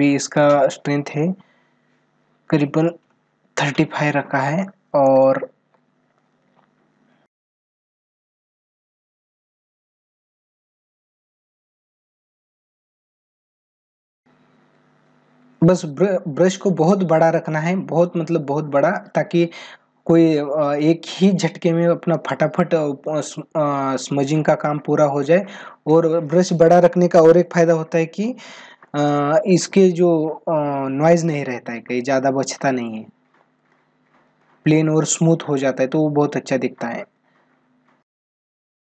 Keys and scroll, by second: 4.8 space, 11.1 space, 13.7 space, 21.8 ctrl+alt+z, 28.6 space, 31.9 ctrl+=, 38.0 space.